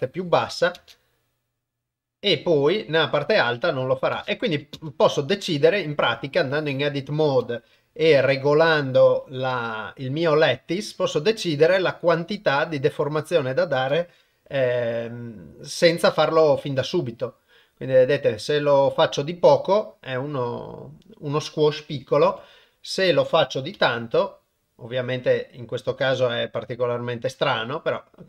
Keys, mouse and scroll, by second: 0.8 shift+space, 4.1 shift+space, 4.9 shift+space, 6.0 Tab, 6.6 click, 8.1 g, 14.5 g, 22.3 g.